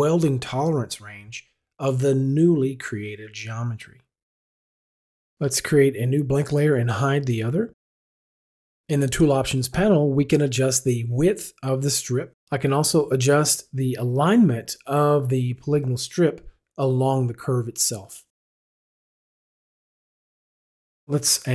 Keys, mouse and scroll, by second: 6.1 click, 6.5 click, 7.8 click, 10.6 click, 12.8 click, 14.1 click, 14.8 click, 15.5 click, 16.6 click, 18.2 click, 19.7 click, 20.3 click.